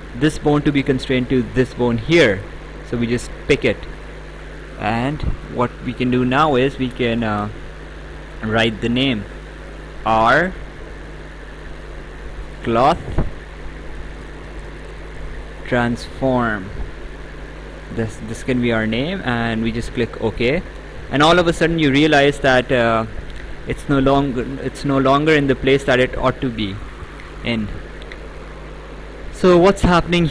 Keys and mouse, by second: 3.5 click, 8.3 r, 9.6 -, 11.2-13.0 typing, 14.1-15.8 typing, 19.7 click.